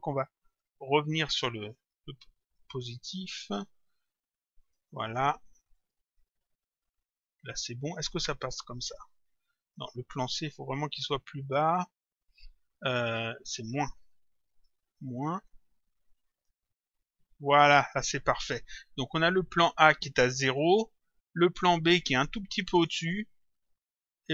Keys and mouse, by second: 0.5 click, 1.8 Home, 2.6 Delete, 3.4 Return, 4.6 click, 5.8 click, 7.1 click, 9.6 click, 11.0 click, 11.7 Left, 13.6 Home, 14.5 Return, 16.3 click, 19.2 click, 20.4 click, 22.8 click.